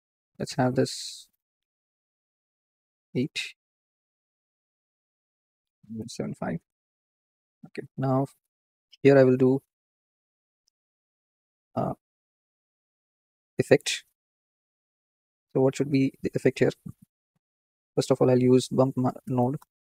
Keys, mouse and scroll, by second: 2.8 KP_0, 3.5 scroll up 6, 6.1-10.1 drag, 7.0-7.6 scroll down 5, 10.5-10.8 scroll up 5, 11.1-12.0 middle drag, 12.0-12.6 scroll down 2, 12.6-14.8 middle drag, 15.1-15.6 middle drag, 16.0 middle click.